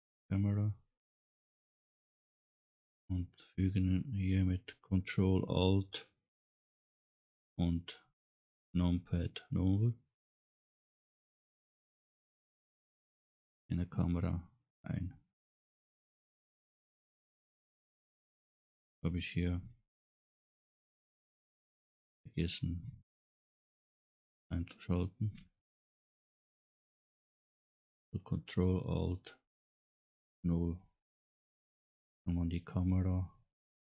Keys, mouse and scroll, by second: 25.4 n, 30.0 ctrl+alt+KP_0.